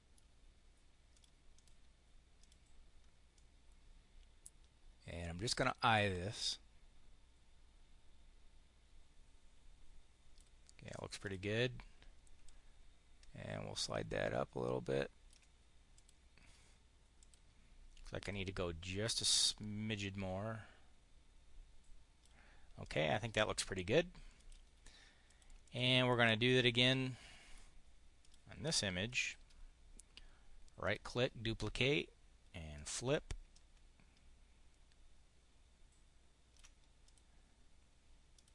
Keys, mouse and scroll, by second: 0.8 click, 1.2 click, 2.2 click, 3.2-10.4 drag, 10.7 click, 11.1 click, 12.3-15.3 ctrl+drag, 15.8 click, 17.1 click, 18.1 click, 19.0-22.2 drag, 22.7 click, 24.3 click, 25.2 click, 25.5 click, 26.0 click, 26.9 click, 28.0 click, 28.4 click, 29.0 click, 30.7 click, 32.6 click, 33.3-36.6 ctrl+drag, 36.9 click, 38.2 click.